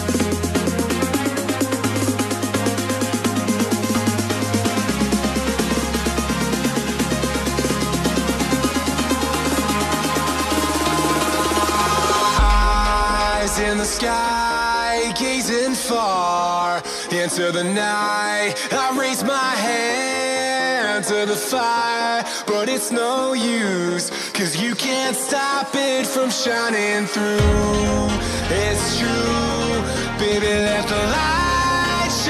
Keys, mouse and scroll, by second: 0.8 g, 2.3-4.4 middle drag, 4.4 KP_1, 5.5-6.0 scroll down 4, 6.0-7.7 scroll up 4, 7.7-10.3 middle drag, 10.3 z, 11.5-13.2 drag, 13.2 b, 15.5-18.5 drag, 19.2 ctrl+KP_Add, 19.4 ctrl+KP_Add, 19.7 ctrl+KP_Add, 19.9 ctrl+KP_Add, 20.2 ctrl+KP_Add, 20.5 ctrl+KP_Add, 20.8 ctrl+KP_Add, 21.6 ctrl+KP_Add, 22.7 KP_1, 25.2 r, 28.0 g, 31.7-32.2 scroll down 1.